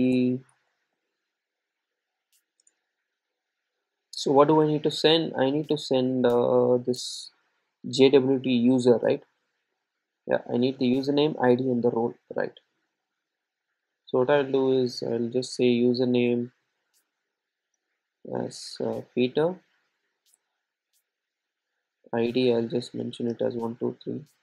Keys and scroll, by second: 11.6 super+c.